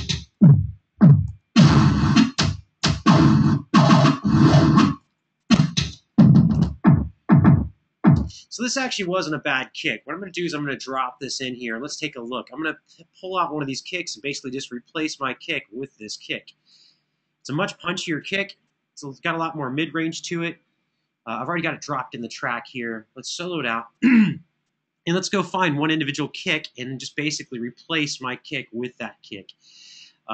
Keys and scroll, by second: 1.1 Page_Down, 1.8 Page_Down, 2.5 Page_Down, 3.2 Down, 3.8 Down, 4.6 Page_Up, 4.8 Page_Up, 4.9 Page_Up, 5.3 Page_Up, 5.7 Page_Up, 6.3 Page_Up, 7.9 space.